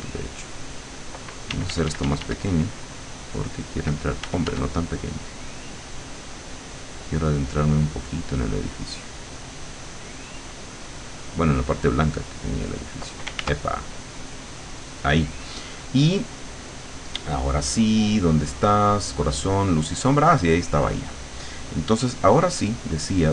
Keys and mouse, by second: 1.5 d, 2.7-3.8 drag, 4.3 f, 5.0-9.0 drag, 9.3-10.7 drag, 13.4 ctrl+z, 13.9 ctrl+click, 19.6-20.9 drag, 22.9 click.